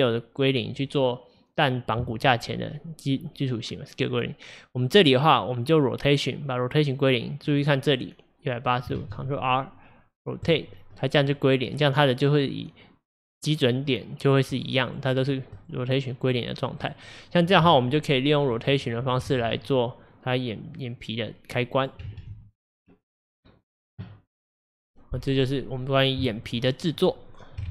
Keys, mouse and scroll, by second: 9.0 ctrl+a, 12.7-14.6 middle drag, 14.6 click, 14.9 drag, 15.2 drag, 15.6 click, 16.1-16.9 middle drag, 16.9 click, 18.6 click, 19.4 ctrl+z, 19.6-22.2 drag, 22.2 ctrl+z, 25.2-27.7 middle drag.